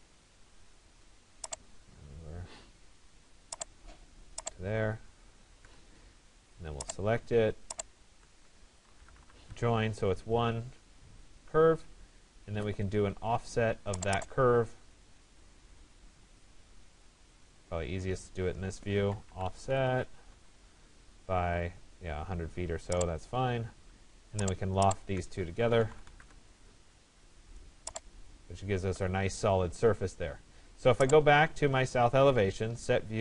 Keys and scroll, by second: 5.3 Return, 20.0 Return, 25.8 Return, 29.3 Return.